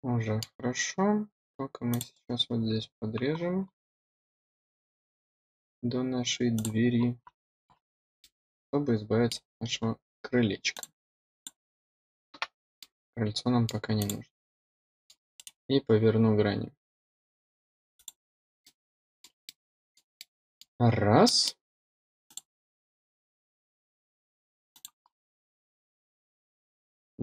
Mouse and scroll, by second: 0.0-1.2 drag, 1.2 middle click, 1.6 middle click, 2.4-2.8 middle drag, 2.9 middle click, 3.4 click, 3.7 middle click, 4.6 click, 5.4 middle click, 5.8 click, 5.9 middle click, 6.4 click, 7.0 click, 7.9 middle click, 8.0 middle click, 8.3 middle click, 8.7-11.8 drag, 11.8 middle click, 12.2 middle click, 12.6 middle click, 13.0-14.3 drag, 14.3 scroll up 4, 14.8 click, 15.0-15.4 scroll down 6, 15.9-16.6 scroll up 2, 16.6-20.6 drag, 21.2 middle click, 21.7 middle click, 22.0 middle click, 22.2 middle click, 22.9-25.9 drag, 25.9 scroll up 2, 26.3-27.2 drag.